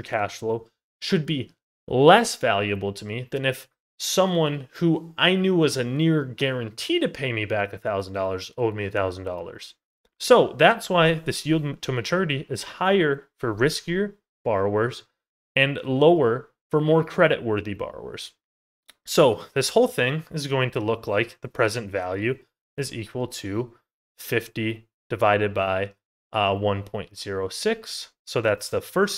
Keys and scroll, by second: 14.5 ctrl+z, 18.6 ctrl+z.